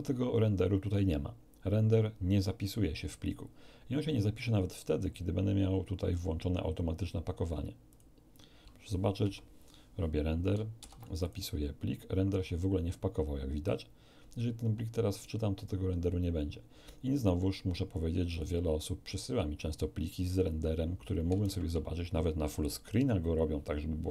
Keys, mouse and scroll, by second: 6.1 click, 7.9 click, 9.2 F12, 10.7 ctrl+s, 11.2 ctrl+click, 15.1 click, 18.3 click, 21.4 shift+space, 22.1-22.7 shift+scroll up 3.